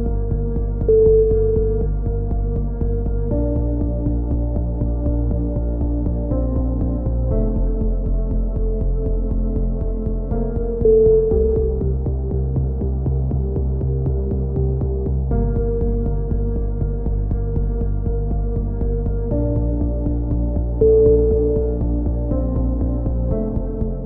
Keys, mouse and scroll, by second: 8.3-9.4 middle drag, 9.4 click, 10.2 click, 10.9-12.0 middle drag, 12.0 v, 13.0 z, 16.8 ctrl+KP_7, 20.7 a, 20.8 z, 21.3 z, 21.6 z.